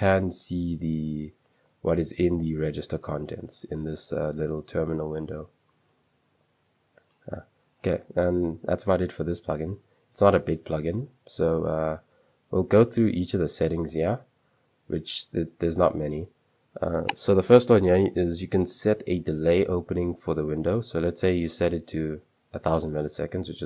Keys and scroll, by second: 0.2 Return, 6.4 Return, 11.8 super+2, 13.0 j, 13.2 j, 14.3-15.9 typing, 20.5-23.5 typing, 22.3 Escape.